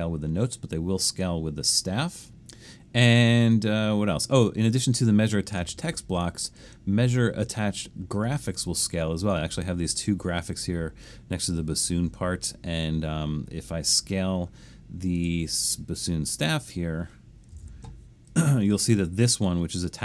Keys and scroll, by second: 17.3-18.1 typing.